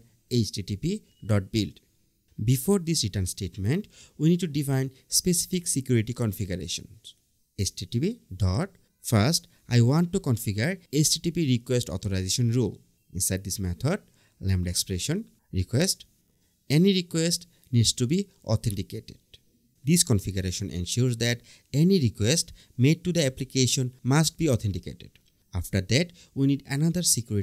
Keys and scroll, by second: 0.5 BackSpace, 1.7 Return, 2.9 Return, 7.3 Return, 8.2 Return, 10.0 Return, 11.6 Return, 13.8 BackSpace, 15.1 Return, 17.0 Return, 17.5 Tab, 19.3 Down, 20.2 Return, 24.8 Right, 25.6 Right.